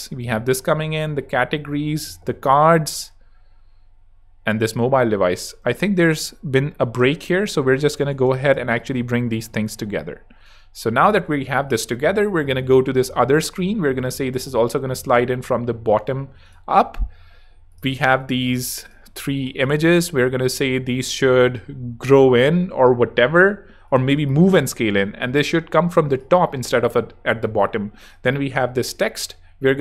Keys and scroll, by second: 2.0 space, 4.5 space.